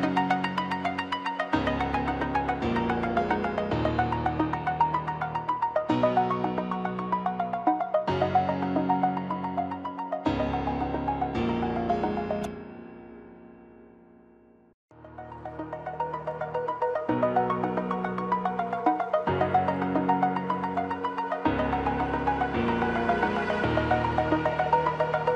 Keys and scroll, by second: 5.5 ctrl+j, 13.3 ctrl+=.